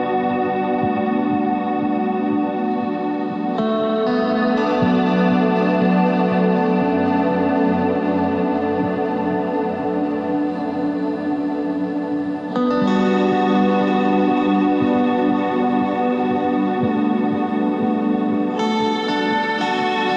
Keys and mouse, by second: 0.0 Tab, 1.3 Tab, 2.6-6.3 drag, 6.3 e, 8.7 middle click, 10.5 middle click, 10.8 ctrl+Tab, 14.9 s, 18.6 z, 18.8 c.